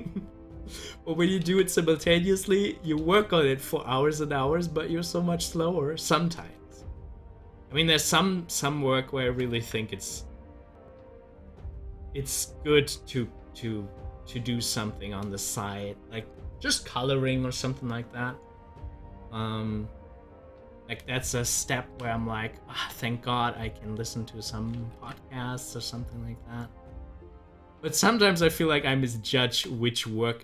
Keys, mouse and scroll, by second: 0.3 click, 1.4 ctrl+z, 3.0 ctrl+z, 6.6 ctrl+z, 9.5 ctrl+z, 11.6 ctrl+z, 19.2-22.0 drag, 22.0 space, 22.5 space, 23.8 click, 25.0 ctrl+z.